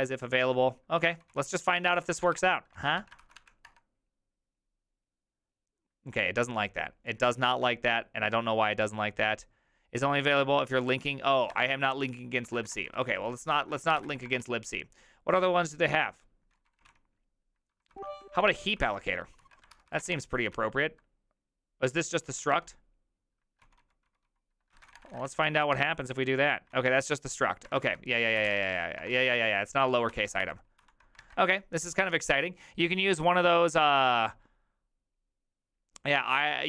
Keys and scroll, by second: 1.1-3.0 typing, 3.2 ctrl+c, 3.4 Up, 3.7 Return, 7.5 ctrl+a, 11.5-14.9 typing, 16.3-18.4 typing, 19.4 ctrl+y, 19.7 ctrl+c, 19.8-21.0 typing, 22.2 ctrl+c, 22.4 ctrl+w, 22.5-25.3 typing, 25.4 ctrl+c, 25.6 Up, 25.7 Return, 26.7 ctrl+a, 27.4-29.1 typing, 30.1 ctrl+n, 30.4 ctrl+n, 30.8 ctrl+n.